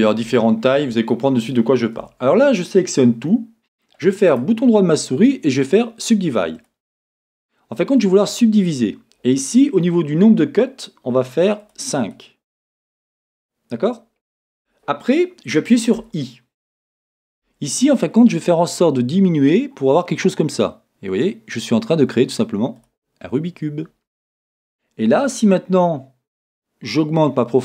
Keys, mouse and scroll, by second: 0.7-4.3 shift+middle drag, 1.1-2.0 scroll down 2, 2.0 scroll down 1, 2.0 Tab, 4.3-6.6 right drag, 11.6-27.6 drag.